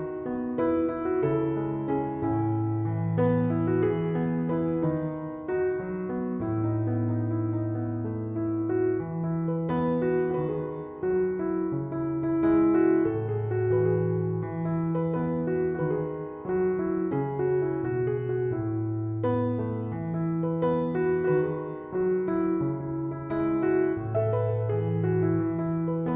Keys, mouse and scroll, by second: 14.2 2, 14.5 Return, 20.1 2, 20.3 Return.